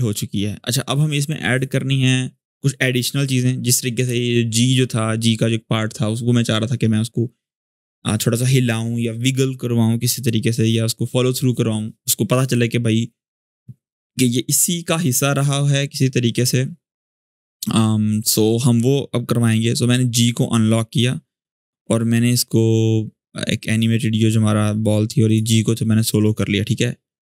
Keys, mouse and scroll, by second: 17.9 click, 23.4-27.2 drag.